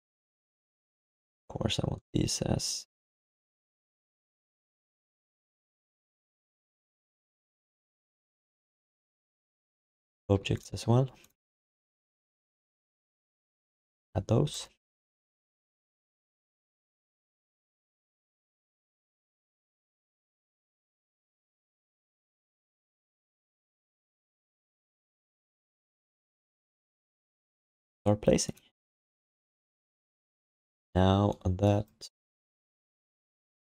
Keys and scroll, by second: 6.6 1, 8.2 alt+shift+d, 19.5 ctrl+s.